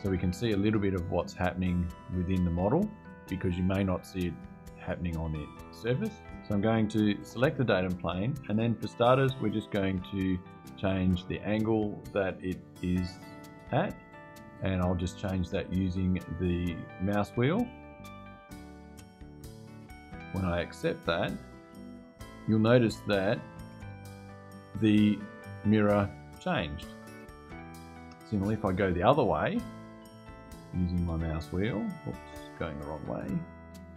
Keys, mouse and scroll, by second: 6.8 click, 8.8 click, 17.4-18.4 scroll up 6, 18.7 scroll up 2, 20.6 Return, 23.6 click, 27.9 click, 29.1 scroll up 1, 29.8-30.1 scroll up 1, 30.5-30.9 scroll up 2, 31.8-32.7 scroll down 4, 32.9-33.6 scroll down 2, 33.8-33.9 scroll down 2.